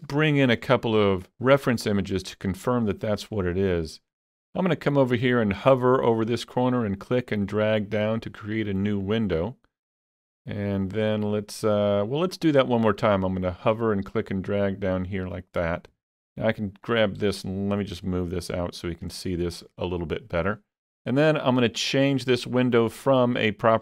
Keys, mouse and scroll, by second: 2.0 click, 2.6 click, 6.4-21.6 drag, 22.6-23.8 drag.